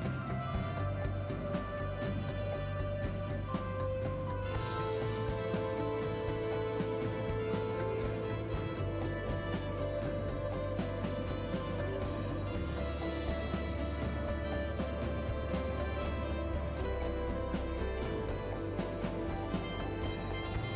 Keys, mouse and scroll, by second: 2.9 click, 3.4 space, 13.9 space, 16.7-18.6 drag, 19.1 space.